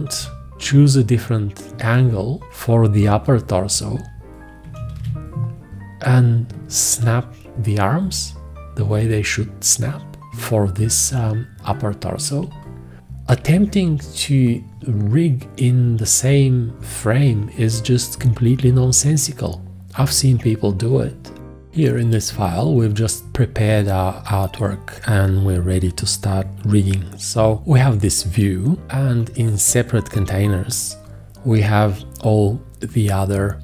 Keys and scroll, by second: 1.7 shift+., 4.7 1, 5.0 `, 12.4 space.